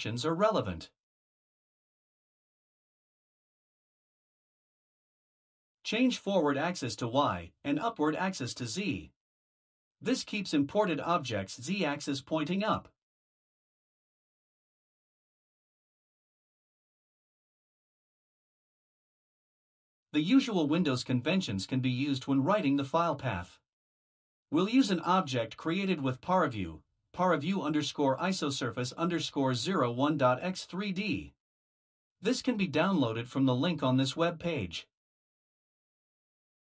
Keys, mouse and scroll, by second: 5.1 BackSpace, 7.7 click, 9.3 Delete, 10.2 shift+y, 11.2-12.0 Right, 12.1 Right, 12.4 Right, 12.5 Right, 12.7-13.3 Right, 13.7 Left, 14.1 shift+Right, 15.7 shift+z, 17.4-18.8 Left, 19.2 Left, 19.4 Left, 20.2 shift+c, 21.0 shift+., 22.8 ctrl+alt+=, 23.0-25.0 typing, 25.8 ctrl+alt+=, 26.4-29.3 typing, 30.4-32.3 typing.